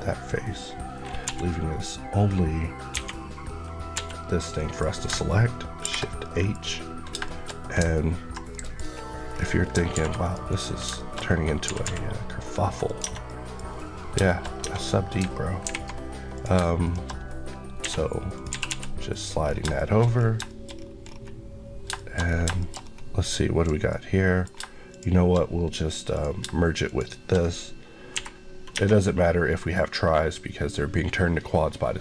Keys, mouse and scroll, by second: 1.1 l, 3.8 l, 4.5 middle click, 5.7 shift+h, 6.1 middle click, 6.4 scroll up 1, 7.0 shift+scroll up 1, 7.1 shift+middle click, 8.6 scroll up 1, 9.2-9.8 scroll down 2, 9.8 ctrl+r, 10.1 click, 10.3 right click, 10.8 shift+middle click, 11.0 shift+scroll down 1, 11.1-11.5 scroll up 1, 11.5 typing, 12.7 click, 12.9 Tab, 13.1 middle click, 13.6-14.5 scroll up 4, 14.1 shift+middle click, 14.5 Tab, 15.5 alt+h, 16.2 click, 16.4 shift+click, 16.9 click, 17.7 click, 17.7 j, 18.2 click, 18.4 g, 18.5 g, 19.0 click, 19.3 scroll, 19.3 scroll down 1, 19.7 shift+middle click, 20.3 shift+middle click, 20.6 scroll up 1, 21.7 shift+scroll up 1, 21.8 shift+middle click, 22.4 shift+middle click, 22.5 shift+middle click, 22.7 scroll up 1, 23.5 click, 23.7 middle click, 24.8 shift+click, 26.3 shift+click, 27.3 click, 28.1 j, 28.6 Tab, 31.9 Tab.